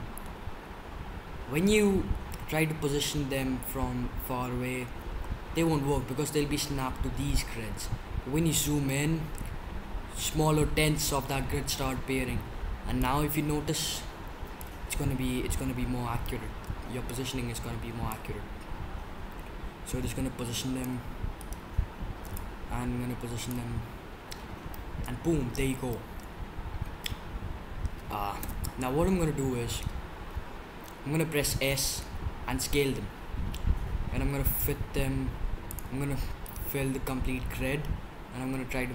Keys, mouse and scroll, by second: 7.4-11.3 middle drag, 12.9-14.5 drag, 14.5 middle click, 18.0-19.6 middle drag, 22.3-23.2 middle drag, 24.0-28.4 middle drag, 28.4 KP_7, 32.3 s, 37.2 s.